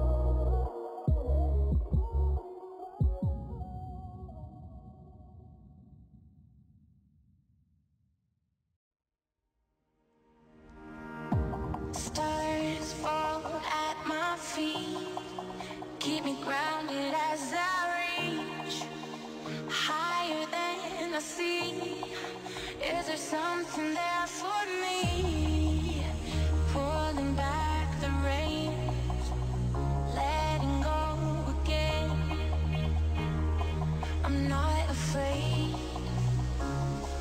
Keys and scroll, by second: 10.3 ctrl+space, 25.4 ctrl+s, 31.0 t, 34.1 ctrl+s.